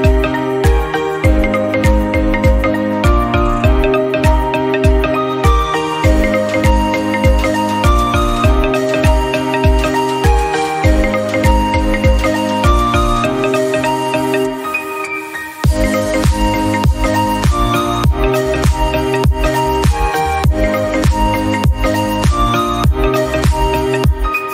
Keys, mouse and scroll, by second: 1.9-3.3 drag, 4.3 click, 5.2 Tab, 5.2 scroll down 1, 5.4 middle drag, 5.7-6.9 scroll up 2, 5.9 Tab, 6.0 middle click, 6.9 click, 7.2 click, 7.7 shift+middle click, 8.2 click, 8.9-10.1 shift+middle drag, 10.9 click, 11.7 Tab, 11.8 scroll down 1, 12.0 middle click, 12.4 click, 15.6-16.4 scroll down 1, 16.4 scroll up 2, 16.5-18.4 middle drag, 18.4 click, 18.8 Tab, 19.0 shift+middle click, 19.6 3, 19.8 click, 20.6 shift+click, 21.0 shift+middle click, 21.3 scroll up 1, 21.6-23.2 shift+drag, 23.5-24.5 drag.